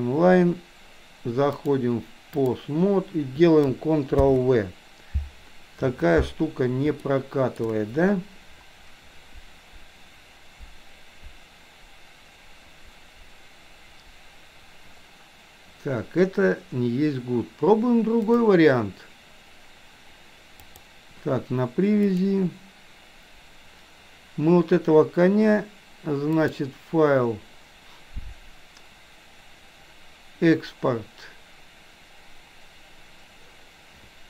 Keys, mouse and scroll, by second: 1.5-2.7 drag, 4.2 ctrl+v, 6.9-7.7 shift+middle drag, 18.3-22.7 drag, 26.4-34.2 drag.